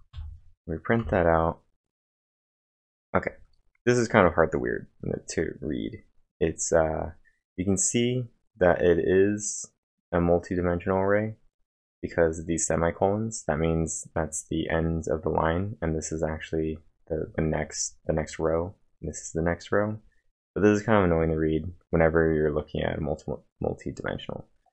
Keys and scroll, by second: 0.1 Up, 1.0 Return.